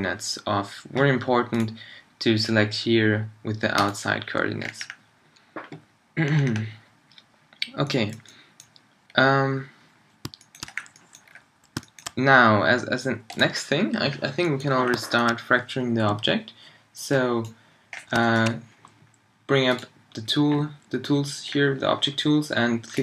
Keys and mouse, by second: 17.9-19.8 drag, 21.4-23.0 drag.